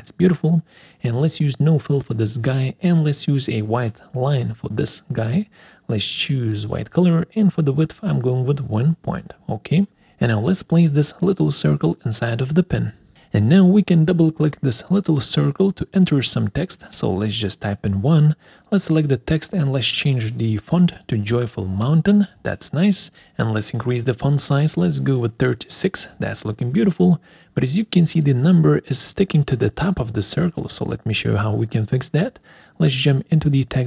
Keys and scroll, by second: 6.9 ctrl+a, 7.5 1, 7.9 Return, 17.3 1, 18.5 ctrl+a, 21.1-22.3 typing, 29.0 alt+4.